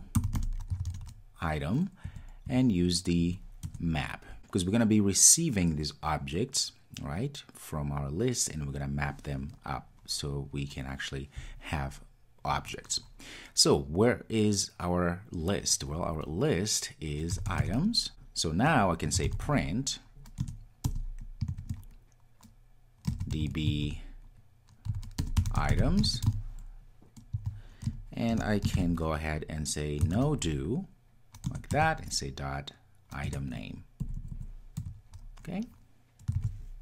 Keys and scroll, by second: 3.8 Return, 20.5 Return, 31.5 Return, 36.4 super+s.